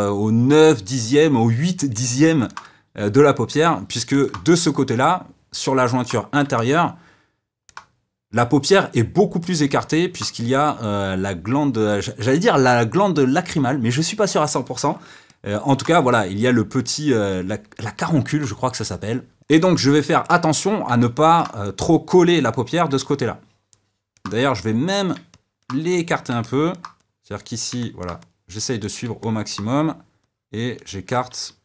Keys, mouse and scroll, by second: 19.6-24.5 middle drag, 24.5 click, 25.3 middle click, 25.9 click, 26.4 middle click, 27.0 click, 27.8 middle click, 28.2-29.2 drag, 29.2-30.2 middle drag, 30.2-31.3 drag, 31.3 f.